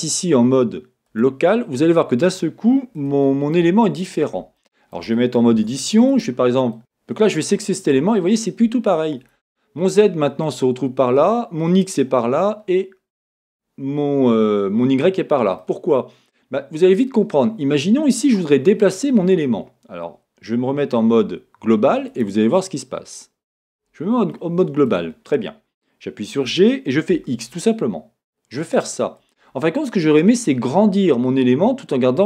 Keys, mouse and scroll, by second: 3.4 middle click, 3.7 scroll, 4.6 shift+middle click, 5.5 Tab, 6.1 click, 6.7 middle click, 7.3 click, 8.3 middle click, 10.3-22.1 middle drag, 22.1-24.3 drag, 24.3-27.1 middle drag, 26.5 g, 29.3 click, 31.3-32.2 middle drag.